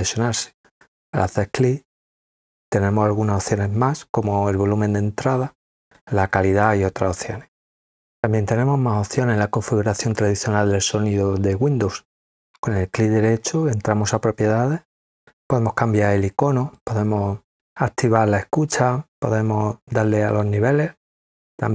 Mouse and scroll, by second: 1.1 click, 12.3 right click, 14.0 click, 16.7 click, 19.8 click, 20.3 click.